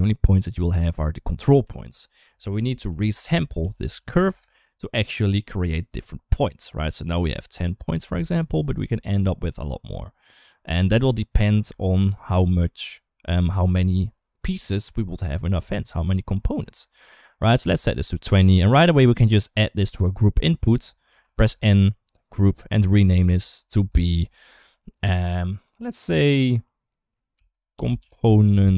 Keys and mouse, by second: 1.4 Tab, 2.8 shift+a, 8.2 shift+click, 18.7 click, 18.9 click, 21.2 n, 23.0 click.